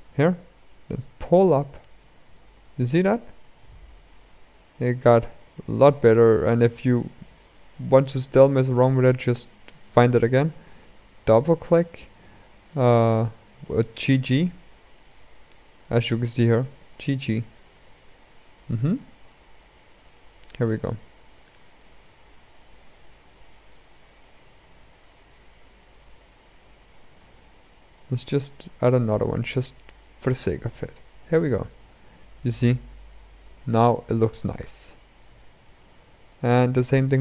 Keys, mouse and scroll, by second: 5.4 g, 16.3 g, 21.6 ctrl+r, 31.4 Tab, 31.8-32.3 scroll down 2, 32.3-33.2 scroll up 2, 33.2-35.6 middle drag, 35.6-36.0 scroll down 1, 36.0-36.7 middle drag, 36.7 Tab.